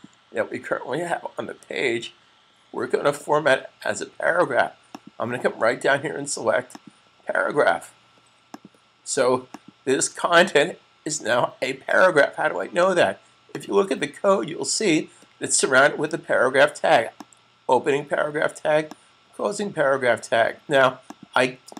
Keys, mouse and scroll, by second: 0.2 super+z, 0.9 z, 1.4 z, 3.7 typing, 4.8 click, 13.4 click, 17.0 click.